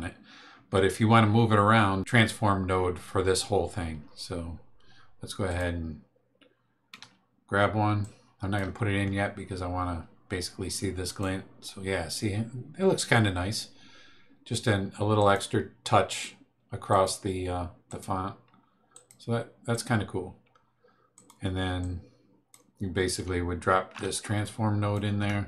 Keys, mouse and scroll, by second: 5.4 click, 6.9 t, 8.0 click, 11.0 click, 15.2 click, 16.9 click, 17.8 click, 18.9 click, 19.7 click, 21.1 click, 21.8 click, 24.4 ctrl+click.